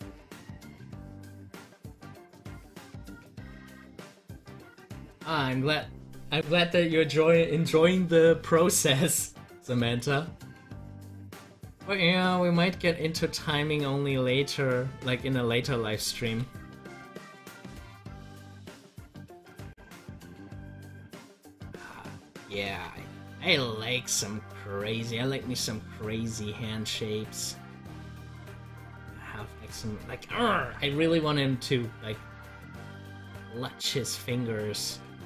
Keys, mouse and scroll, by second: 2.3-11.1 drag, 11.1 double click, 12.4-16.8 drag, 16.8 z, 17.6-22.6 drag, 22.6 ctrl+z, 23.3-35.2 drag.